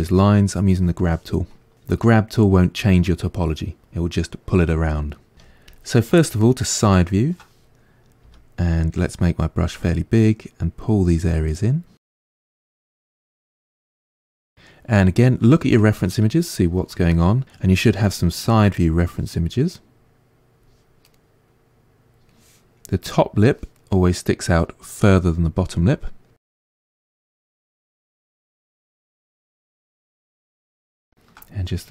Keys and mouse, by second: 5.3 f, 8.2 f, 9.9-13.9 drag, 13.9-18.3 middle drag, 18.3-23.8 drag, 23.8-26.8 middle drag, 26.8 click, 27.3-28.5 middle drag, 28.5 click, 28.9 middle click, 29.6 click, 30.2 middle click, 30.4 click, 30.9 ctrl+middle click, 31.7-31.9 drag.